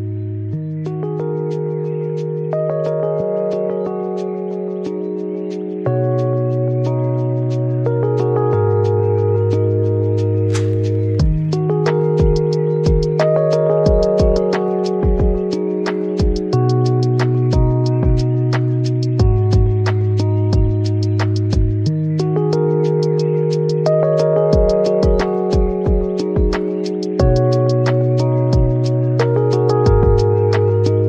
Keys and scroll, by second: 1.0 3.